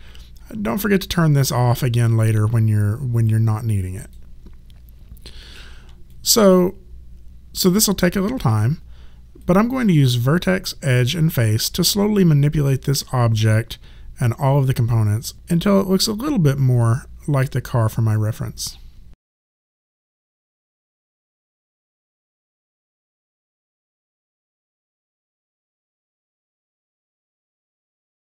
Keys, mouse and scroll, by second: 1.7 click, 6.1 alt+click, 9.4 right click, 19.5 click, 20.4 click, 21.3 r, 21.6 click, 22.2 click, 23.0 click, 23.2 w, 23.4 click, 23.8 click, 24.3 alt+click, 24.7 right click, 25.0 click, 25.8 alt+click.